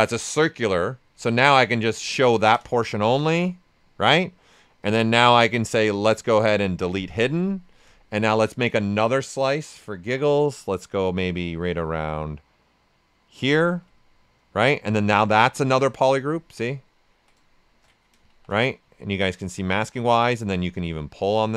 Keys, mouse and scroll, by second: 1.6 ctrl+shift+click, 2.2 ctrl+right click, 2.7 shift+f, 3.1 alt+right click, 4.8-6.1 drag, 6.9 click, 7.7 right click, 9.6-14.5 ctrl+shift+drag, 14.5 shift+f, 15.1 right click, 16.1 ctrl+shift+click, 18.2 shift+f, 18.9 ctrl+right click, 19.3 ctrl+click, 19.7 typing, 19.9 right click, 20.7-21.5 drag.